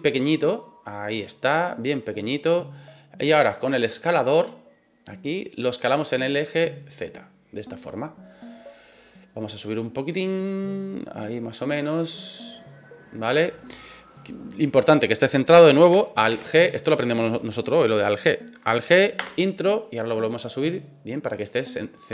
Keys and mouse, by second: 2.0 click, 6.2-7.9 drag, 9.3 click, 10.1-11.5 drag, 11.7 middle click, 12.6-14.1 middle drag, 16.3 alt+g, 19.1 Return, 20.2-21.7 drag.